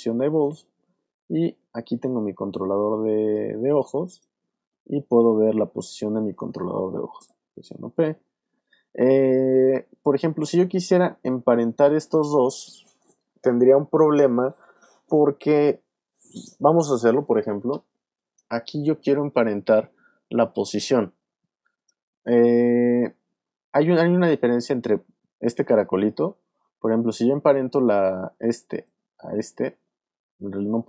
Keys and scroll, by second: 7.2 p.